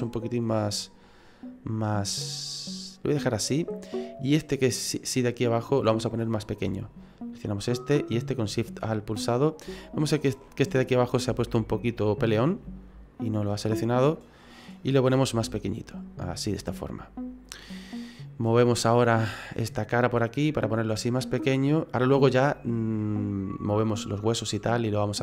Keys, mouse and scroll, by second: 4.3 right click, 7.1 alt+shift+right click, 8.6 middle click, 9.9 alt+shift+right click, 10.4 middle click, 11.7 alt+shift+Right, 12.0 middle click, 13.2 alt+shift+Right, 13.6 middle click, 14.4 middle click, 15.3 s, 16.7 middle click, 18.6 click, 19.0-19.7 scroll down 4, 19.7 right click, 20.4 click, 22.2 middle click, 23.0 middle click.